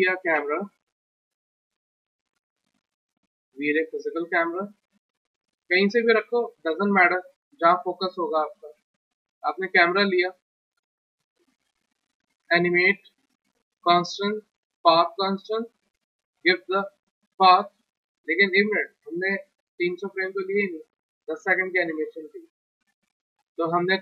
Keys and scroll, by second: 8.4 w, 22.4 w.